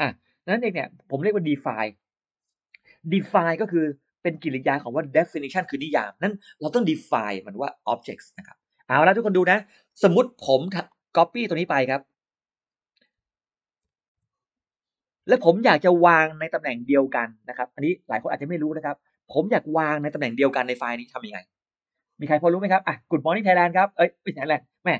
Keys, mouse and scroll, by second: 10.7 click, 11.4 click, 13.7 ctrl+c, 15.4 click, 17.6 middle click, 18.2-18.5 scroll up 2, 22.3-23.6 scroll up 4, 23.6-24.6 scroll up 6.